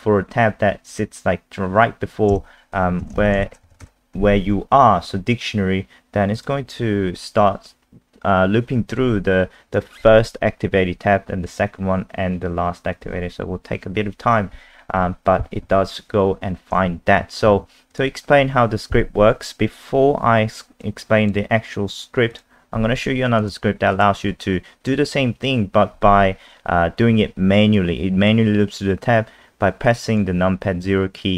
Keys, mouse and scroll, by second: 2.3-4.3 typing, 6.4 click, 17.5 super+2, 17.9 click, 18.5-19.5 scroll up 1, 20.8 click.